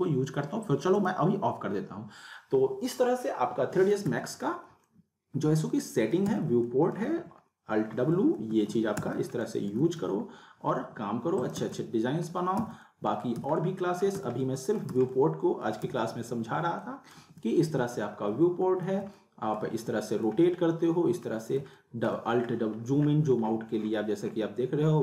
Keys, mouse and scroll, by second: 0.9 click, 4.1 z, 4.9-6.5 alt+middle drag, 6.3 z, 6.7 alt+middle click, 7.0 alt+w, 7.9 w, 8.5 alt+w, 9.1 z, 9.4 alt+middle click, 10.0 w, 10.8 alt+w, 11.4 click, 11.6 z, 11.8-12.4 middle click, 12.6 z, 12.9-13.4 alt+middle click, 13.3 z, 13.6-14.2 alt+middle click, 14.1 alt+z, 14.5-15.0 alt+middle click, 14.9 z, 15.1-15.7 middle click, 15.9 z, 16.8-17.5 alt+middle click, 17.2 alt+w, 17.8 w, 18.6 alt+w, 19.2-19.7 alt+middle click, 19.7 alt+w, 20.5-21.3 alt+middle drag, 22.4 scroll down 1, 23.0-23.3 scroll up 1.